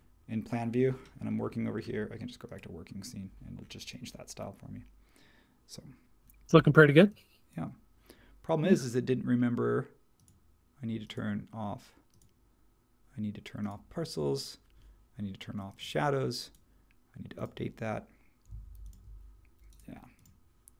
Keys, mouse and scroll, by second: 18.7 shift+t.